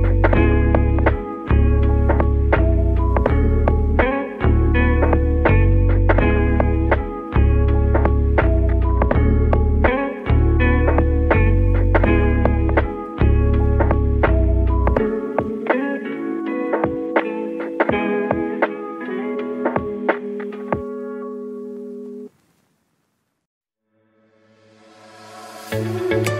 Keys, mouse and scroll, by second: 0.8 Tab, 1.6-2.2 scroll down 2, 2.2 s, 4.9 Tab, 5.4 click, 7.9 click, 8.6-9.5 scroll down 23, 10.3 click, 12.9-15.3 middle drag, 15.3 Tab, 16.2-17.2 middle drag, 17.2 a, 18.0 r, 24.5 Tab, 25.0-26.3 middle drag.